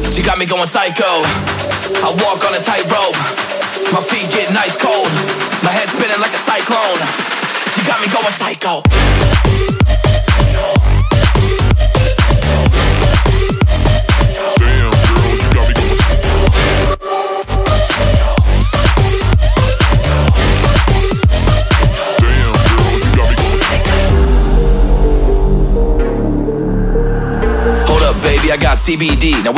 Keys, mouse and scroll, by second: 12.7 ctrl+j, 14.3 ctrl+j, 14.9 ctrl+t, 15.2 shift+click, 19.5 alt+scroll up 1, 19.7 alt+scroll down 1, 20.2 shift+click, 20.8 ctrl+g, 21.4 right click, 25.5 ctrl+j, 26.6 ctrl+i, 27.3 ctrl+z.